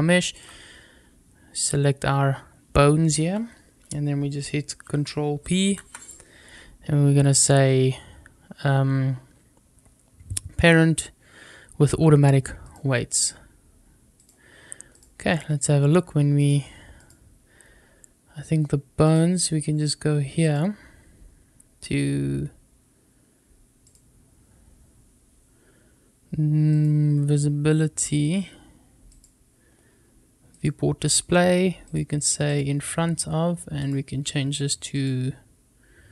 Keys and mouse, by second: 5.5 ctrl+p, 14.0 click, 16.3-17.1 drag, 18.9 click, 20.3 click, 26.6 click, 28.9 click, 30.4-31.8 drag, 32.3 click, 33.7-34.9 drag.